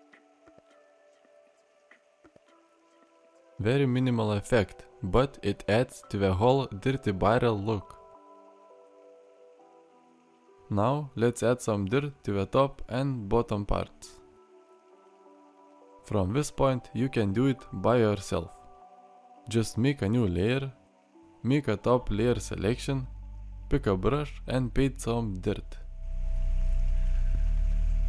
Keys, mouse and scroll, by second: 1.5 alt+r, 2.4-3.1 middle drag, 8.1-9.1 middle drag, 9.4 middle drag, 9.9 middle drag, 10.2 middle click, 10.7 middle click.